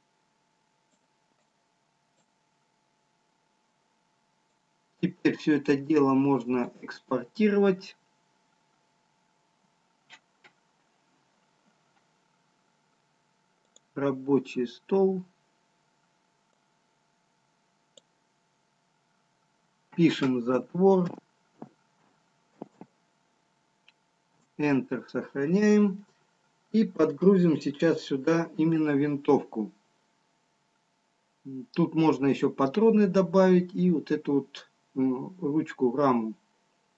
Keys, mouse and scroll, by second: 34.8 Insert.